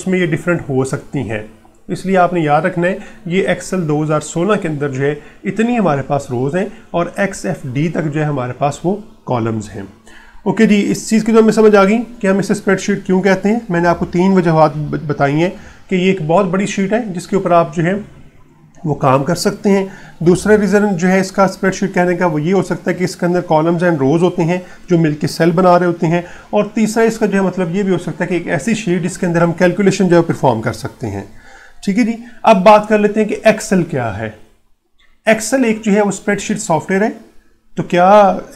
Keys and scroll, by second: 11.7 ctrl+1, 18.6 ctrl+Up.